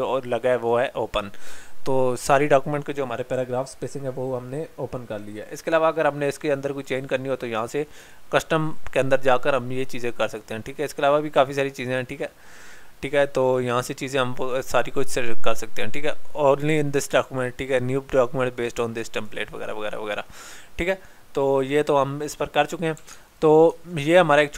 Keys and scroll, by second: 23.1 alt+Tab.